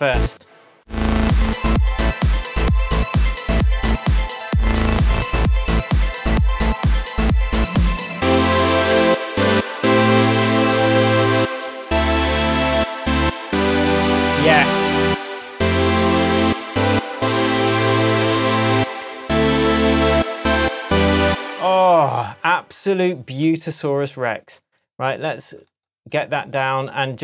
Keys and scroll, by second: 21.2 space.